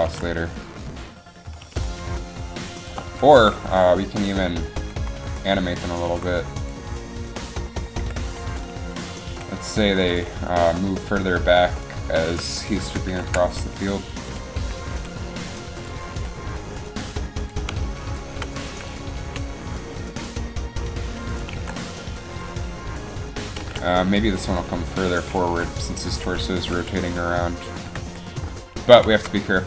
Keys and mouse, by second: 0.1 alt+a, 1.8 alt+a, 3.7 Up, 4.8 Up, 5.3 Down, 6.2 Up, 7.4 Right, 8.2 KP_3, 9.4 g, 10.4 r, 11.3 g, 12.1 z, 12.4 z, 13.2 ctrl+KP_3, 15.0 g, 16.3 r, 17.2 g, 18.8 i, 19.4 a, 21.7 alt+a, 23.8 alt+a, 25.6 Up, 26.7 g, 28.0 g.